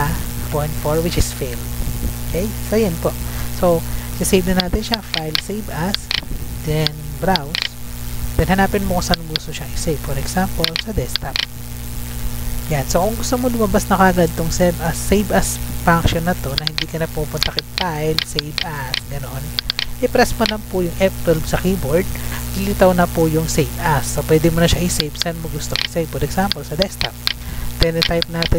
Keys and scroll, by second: 21.9 F12.